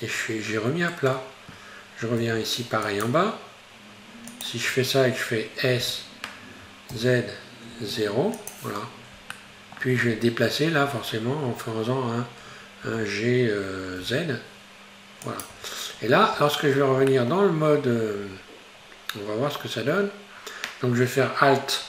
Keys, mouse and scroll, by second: 0.5-2.2 scroll down 2, 2.2 ctrl+r, 5.8 s, 9.4 shift+middle click, 10.1-12.9 scroll up 2, 12.9 g, 15.5 Tab, 16.0-16.4 scroll down 3, 16.4 Tab, 17.2-18.2 middle drag, 18.2-20.2 scroll down 6.